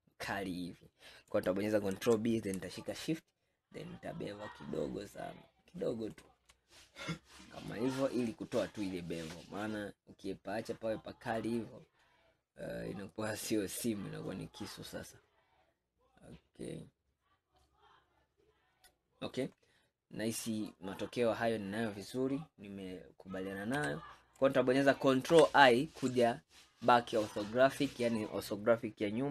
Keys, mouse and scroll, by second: 2.0 ctrl+b, 6.9-8.1 middle drag, 8.1-10.3 scroll down 1, 10.3-12.0 middle drag, 12.0-12.6 scroll down 2, 12.6-15.7 middle drag, 19.9-21.0 middle drag, 21.0-23.8 scroll down 3, 23.8 KP_1, 25.4 ctrl+KP_1.